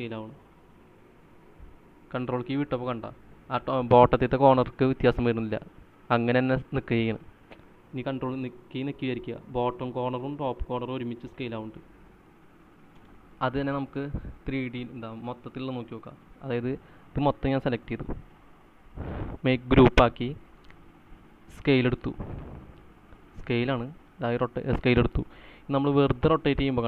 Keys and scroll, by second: 13.3 space.